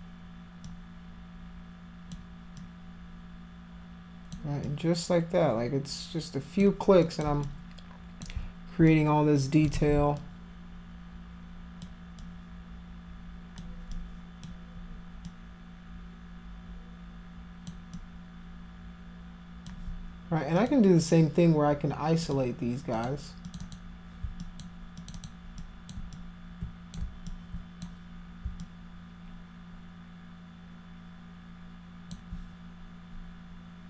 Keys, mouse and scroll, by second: 0.7-2.2 alt+drag, 2.6-4.3 alt+drag, 4.6-6.6 alt+drag, 7.0 alt+click, 7.5 click, 8.9 click, 9.8 ctrl+z, 10.2-11.8 alt+drag, 12.2-13.6 alt+drag, 13.9 alt+click, 15.3-17.7 alt+drag, 18.0-19.7 alt+drag, 20.2 click, 20.6 click, 22.3 click, 23.0 click, 23.5 click, 23.6 click, 24.4 alt+click, 25.0 alt+click, 25.2 alt+click, 25.6 alt+click, 26.2 click, 27.3 alt+click, 28.6-32.1 alt+drag.